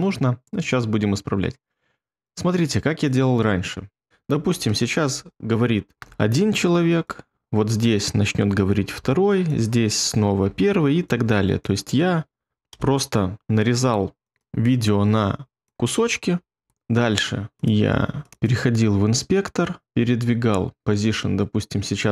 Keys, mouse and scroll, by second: 0.0-2.4 scroll, 6.0 ctrl+b, 8.7 ctrl+b, 10.4 ctrl+b, 12.5 ctrl+b, 12.7 BackSpace, 14.3 BackSpace, 16.6 ctrl+b.